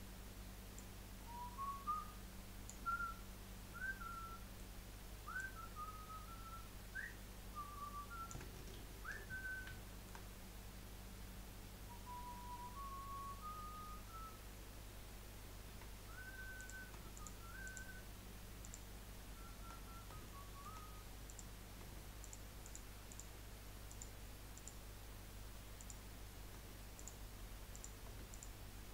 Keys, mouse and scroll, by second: 0.7 click, 2.9-5.4 middle drag, 5.4 click, 8.8 ctrl+z, 9.8 shift+middle click, 10.3-12.2 scroll up 2, 15.7 2, 16.6 click, 17.1 shift+click, 17.6 shift+click, 18.6 shift+click, 19.9 scroll up 1, 21.2 click, 22.2 shift+click, 22.6 shift+click, 23.1 shift+click, 23.9 shift+click, 24.5 shift+click, 25.7 shift+click, 26.9 click, 27.7 click, 28.3 shift+click.